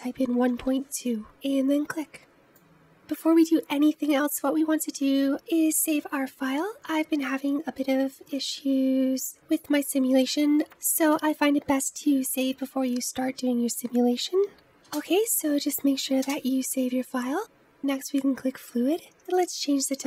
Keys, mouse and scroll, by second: 3.3-5.2 middle drag, 8.3 ctrl+s, 18.0-20.0 drag.